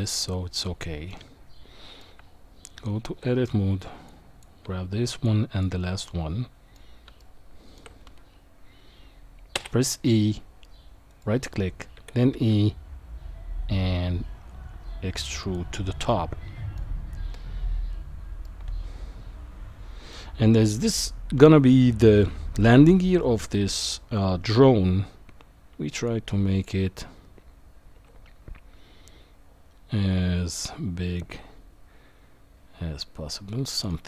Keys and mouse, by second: 1.1-2.0 middle drag, 2.2 Tab, 4.2 click, 5.5 shift+click, 6.0 middle click, 7.2 shift+middle click, 9.5 e, 11.9 e, 16.0 middle click, 18.4-20.1 middle drag, 26.3 shift+click, 27.9 s.